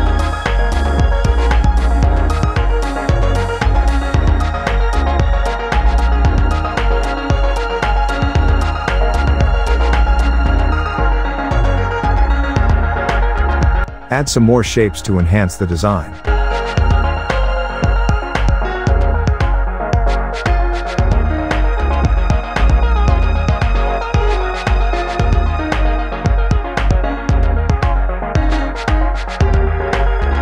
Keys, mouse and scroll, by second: 6.9 click, 8.0 alt+scroll up 1, 8.4 space, 8.5 click, 8.7 space, 10.1 space, 10.1 click, 14.4-17.1 drag, 18.5-19.6 drag, 20.3 alt+scroll up 1, 20.8-22.1 drag, 22.1-22.4 alt+scroll up 1, 23.1-25.7 drag, 25.7 alt+scroll up 1, 25.9 space, 26.1 click, 26.4 space, 26.6-27.4 click, 27.6 alt+scroll up 1, 27.9-30.4 drag.